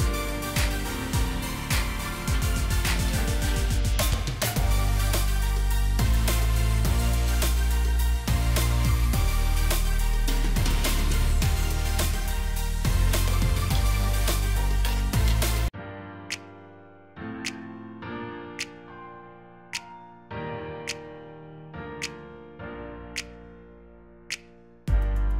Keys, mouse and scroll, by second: 1.2 ctrl+g, 3.2-4.3 scroll down 1, 4.5 alt+scroll down 1, 6.2-6.7 alt+scroll up 1, 8.6-9.1 alt+scroll up 3, 11.3 alt+click, 15.6 shift+click, 23.3 double click.